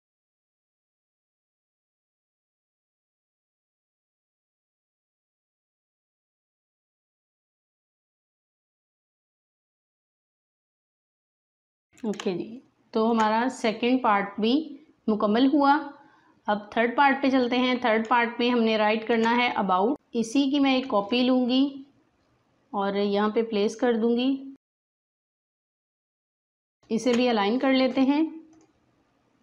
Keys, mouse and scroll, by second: 0.0-3.2 typing, 2.8 click, 3.1 alt+scroll down 1, 3.1 click, 3.5 click, 3.9 Return, 4.1 Escape, 4.3 click, 4.6 shift+click, 6.8 click, 7.9 click, 11.9 alt+scroll down 1, 12.1 space, 12.2 click, 12.6 space, 17.1 space, 17.4 alt+click, 18.0 space, 18.1 click, 18.5 space, 20.3-24.9 drag, 24.9 click, 25.2-26.1 typing, 26.1 click, 26.7 alt+scroll up 1, 26.8-29.4 drag.